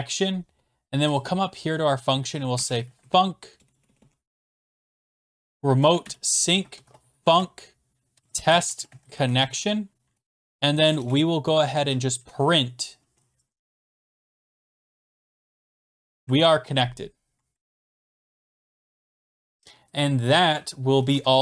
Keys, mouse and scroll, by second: 0.0-0.2 typing, 1.2 click, 2.3-12.2 typing, 6.0 Return, 13.6 Return, 13.6 Down, 13.6-16.7 typing, 13.7 Return, 17.5 Left, 17.6 Left, 18.0 Left, 18.1 Left, 18.2 Left, 18.3 Right, 18.4 Right, 18.7 Right, 19.3 click, 20.0 click, 20.4 click, 21.1 typing.